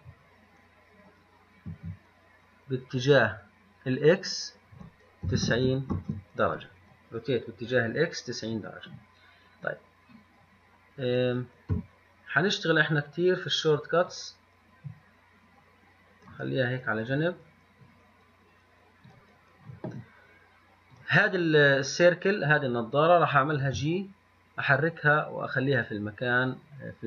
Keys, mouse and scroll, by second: 12.0 n, 14.3-16.3 drag.